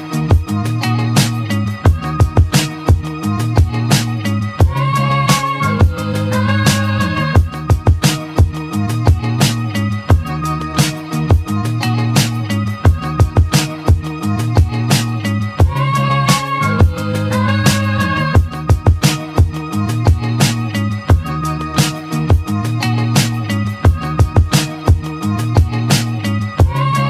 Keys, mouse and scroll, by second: 2.7-4.1 middle drag, 4.1 a, 5.7 s, 10.2-12.8 middle drag, 13.8 ctrl+z, 15.9 1, 16.3 click, 17.1 click, 17.9 g, 21.2 click, 21.9 click, 23.6 s.